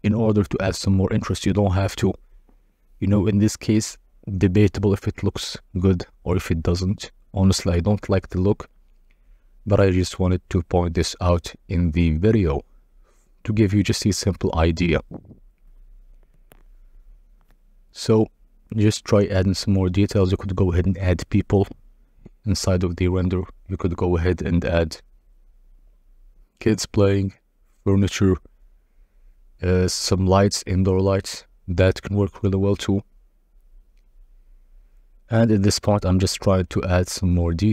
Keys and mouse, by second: 0.0-0.3 typing, 1.7 KP_Subtract, 2.6 Return, 4.3 g, 4.7 shift+z, 5.8 g, 7.7 g, 8.3 shift+z, 10.4 g, 10.4 z, 11.0 shift+click, 11.4 g, 11.4 x, 12.0 shift+drag, 12.7 KP_0, 14.5-16.8 drag, 21.2-22.4 drag, 22.4 middle click, 22.9 r, 23.1 z, 25.2 9, 25.3 0, 25.4 Return, 25.9 g, 26.4 shift+z, 28.6 g, 28.7 z, 29.4-30.1 shift+drag, 30.2 s, 34.5 click.